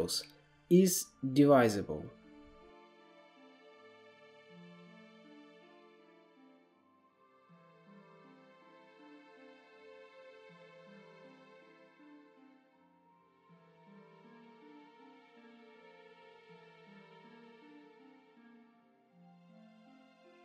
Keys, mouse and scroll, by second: 2.8 scroll down 3, 3.2 middle click, 3.7-9.7 drag, 9.7-10.1 middle drag, 10.1 KP_7, 10.3-11.2 scroll down 4, 11.2-12.5 shift+middle drag, 12.5 click, 14.0-17.4 drag, 17.4-18.1 middle drag, 18.1-19.2 scroll up 1, 19.2 scroll up 2, 19.4-20.4 drag.